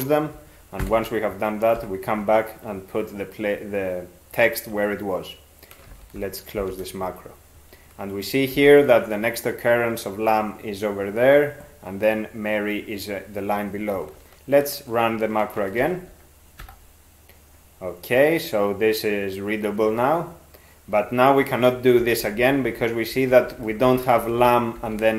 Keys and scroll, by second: 0.8 alt+b, 1.8 ctrl+y, 5.9 ctrl+x, 6.6 ), 8.6 ctrl+n, 15.8 ctrl+x, 16.6 e, 22.0 ctrl+n, 22.2 ctrl+n, 22.4 ctrl+n, 22.7 ctrl+n, 23.1 ctrl+n, 23.5 ctrl+p, 23.7 ctrl+p, 23.9 ctrl+p, 24.2 ctrl+n, 24.8 ctrl+n.